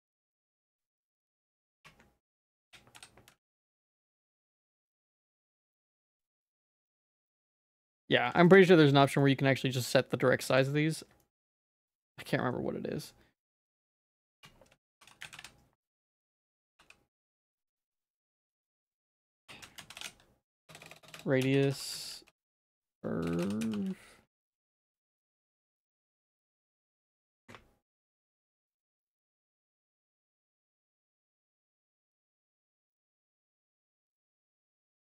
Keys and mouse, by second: 1.8 F3, 7.8 middle click, 8.4 ctrl+s, 8.5 middle click, 9.1 shift+middle click, 9.8 Tab, 10.0 middle click, 10.5 ctrl+s, 10.6 middle click, 11.2 shift+middle click, 11.8 Tab, 12.0 middle click, 13.5 click, 14.4 F3, 16.8 t, 18.2 BackSpace, 18.4 BackSpace, 18.5 BackSpace, 18.7 BackSpace, 20.6-21.1 typing, 22.4 BackSpace, 23.3 BackSpace.